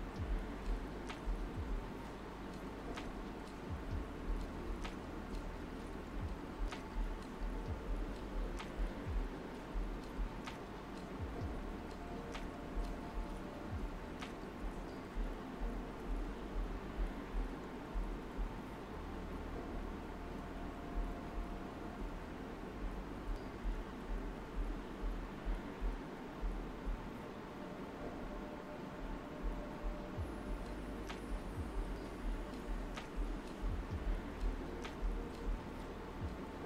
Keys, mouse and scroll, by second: 2.4 right click, 3.2 click, 3.8 right click, 4.7 click, 6.0 right click, 8.6-10.2 shift+drag, 10.2 alt+right click, 11.2 alt+right click, 11.8 alt+right click, 19.8 alt+right click, 21.2 alt+right click, 22.0 space, 22.2 click, 22.5 space, 23.4 alt+right click, 24.5 alt+right click, 27.8-34.8 drag, 34.8 ctrl+z, 35.2 space, 35.4 click, 35.7 space.